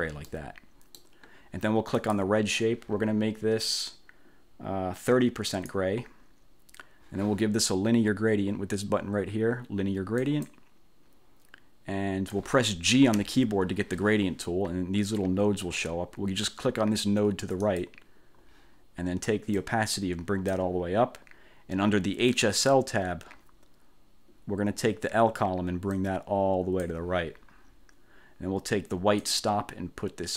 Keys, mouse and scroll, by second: 0.0 1, 0.4 click, 2.1 click, 5.6 click, 10.3 click, 13.2 g, 17.7 click, 19.6-20.8 drag, 22.4 click, 26.1-27.2 drag, 29.4-30.3 drag.